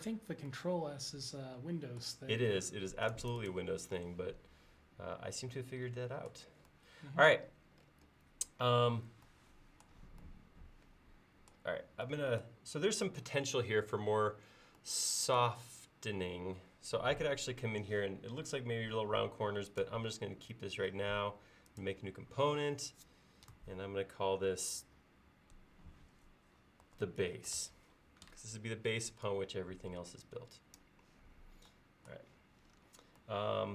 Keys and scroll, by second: 26.7-28.1 typing.